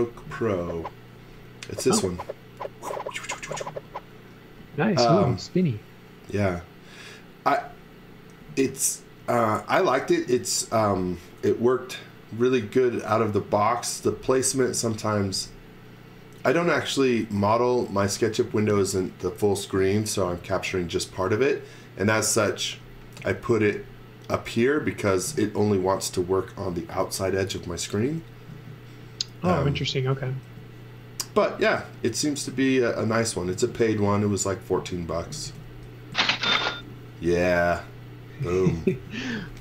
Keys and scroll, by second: 23.2 z, 29.7 space, 30.4 l, 35.4 space, 36.1 z, 36.8 l, 38.9 e.